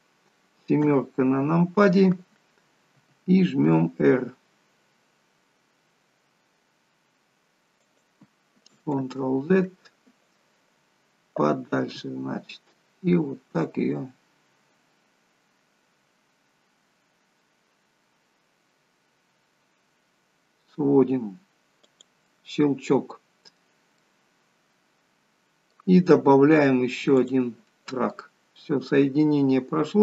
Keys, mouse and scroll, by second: 0.9 KP_7, 3.0 r, 9.1 ctrl+z, 11.9 r, 22.6 middle click, 28.1 middle click.